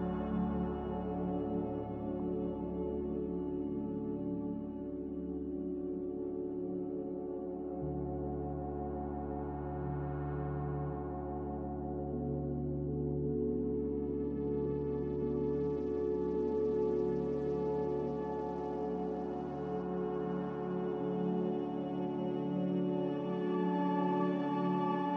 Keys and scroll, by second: 2.7-4.2 typing, 6.4 5, 6.4 0, 8.4 Return, 8.7 3, 8.7 6, 8.7 0, 8.8 Return, 12.3 b, 14.7-16.3 typing, 19.1-20.8 typing, 21.9 typing, 23.3 0, 23.5 Return.